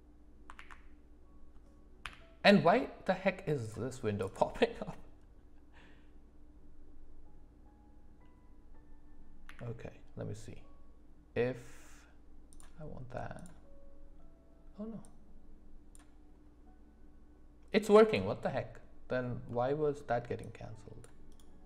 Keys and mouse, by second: 0.5 alt+w, 2.0 n, 9.4 d, 15.1-18.1 drag, 19.5-20.0 middle drag, 20.4-21.6 drag.